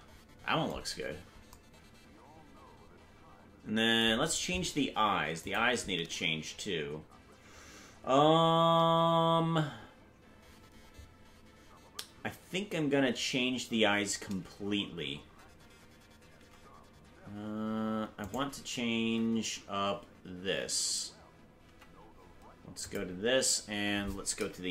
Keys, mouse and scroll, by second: 1.0-2.1 scroll down 3, 5.5 click, 19.1 Tab, 21.6 Tab, 22.8 click.